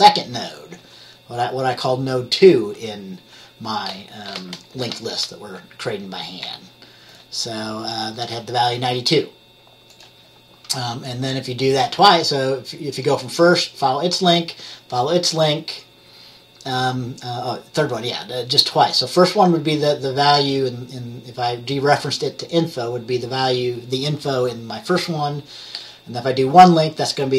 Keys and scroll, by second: 6.5 F10.